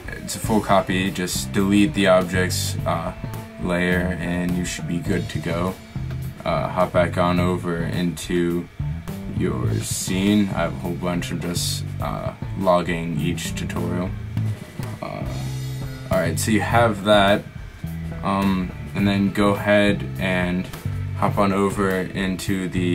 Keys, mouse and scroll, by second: 2.2-4.0 drag, 6.2-8.2 drag, 11.3 middle click, 22.2 ctrl+Left.